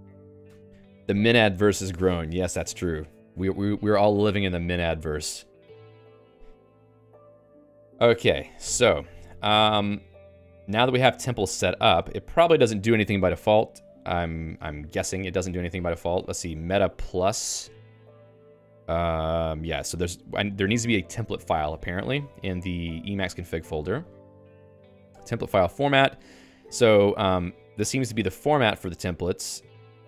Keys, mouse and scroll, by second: 0.1 ctrl+alt+x, 7.0 Escape, 7.1-8.2 typing, 8.9 ctrl+s, 15.5 k, 16.0 o, 16.1 Return, 21.5 alt++, 21.8 Escape.